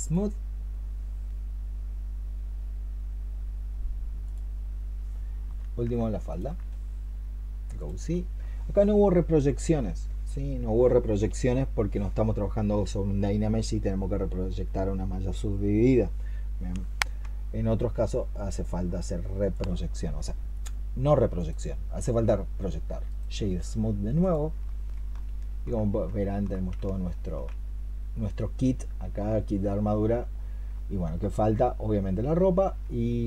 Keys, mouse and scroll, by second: 6.1 alt+click, 20.6 middle click, 22.9 right click, 25.0 alt+middle click, 26.1 alt+middle click, 26.7 shift+middle click, 27.6-28.0 shift+scroll down 1, 28.0 middle click, 30.6 middle click, 32.7 alt+middle click.